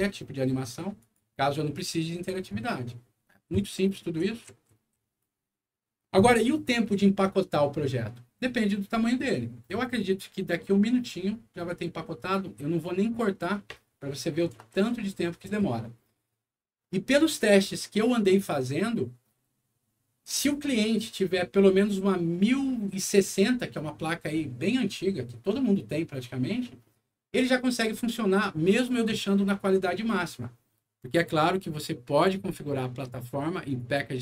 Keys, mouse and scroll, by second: 0.9 click, 3.5-5.1 right drag, 4.2 w, 4.8 a, 31.5 click, 33.6 click.